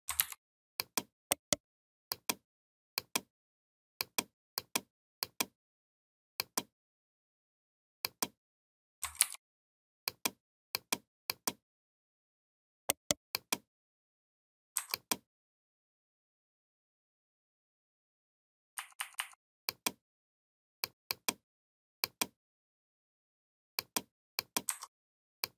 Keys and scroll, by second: 9.0 ctrl+g, 18.6 a.